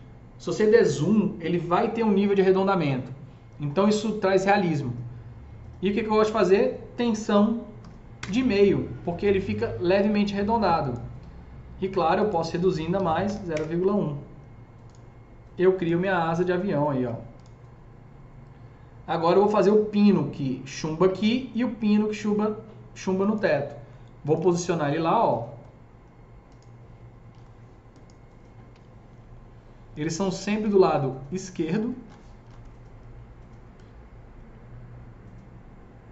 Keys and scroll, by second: 7.2 KP_Decimal, 7.7 KP_5, 8.1 Return, 12.9 KP_Decimal, 13.3 KP_1, 13.4 Return, 16.0 F3, 16.5 F4, 16.9 F4, 24.2-25.1 typing, 28.7 w, 30.5 s, 32.6 F3.